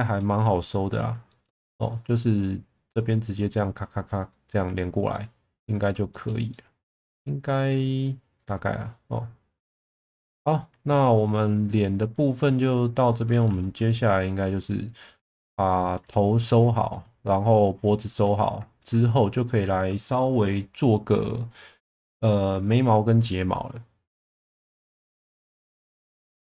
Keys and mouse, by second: 0.6 middle click, 1.3 shift+middle drag, 5.1 middle click, 6.1 shift+middle click, 6.5 middle click, 7.6 click, 8.4 click, 12.3 click, 13.0 middle click, 13.9 alt+middle click, 15.8 shift+middle click, 18.2 middle click.